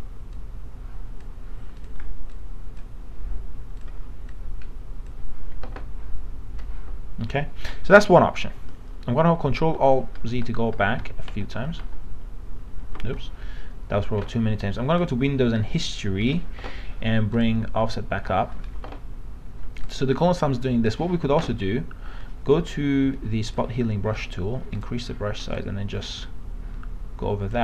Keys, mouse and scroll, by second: 1.8 alt+click, 3.8 alt+click, 9.6 ctrl+alt+z, 10.2 ctrl+alt+z, 10.4 ctrl+alt+z, 15.0-24.2 drag, 24.2 right click, 24.8-27.6 drag.